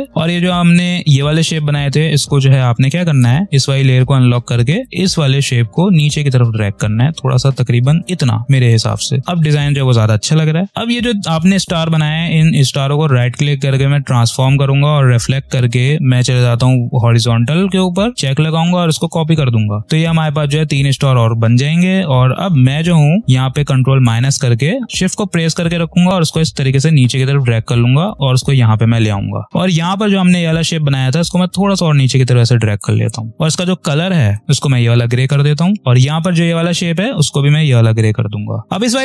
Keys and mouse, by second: 3.2-4.2 drag, 8.3 space, 10.7-12.4 drag, 12.4 right click, 15.0 click, 18.7 click, 22.9 ctrl+-, 23.5 click, 23.8 space, 25.5-33.3 shift+drag, 33.3 space, 33.3 click, 38.6 ctrl+z, 38.9 click.